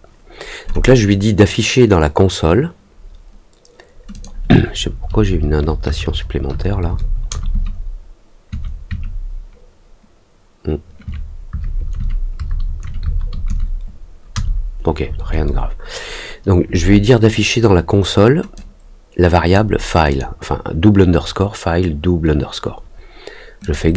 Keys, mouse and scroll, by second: 4.1 click, 18.5 click, 20.0 click, 23.6 click.